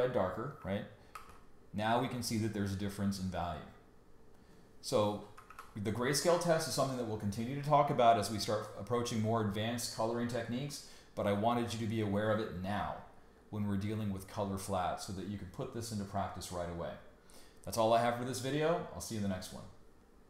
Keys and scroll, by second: 1.1 super+y, 5.4 super+y.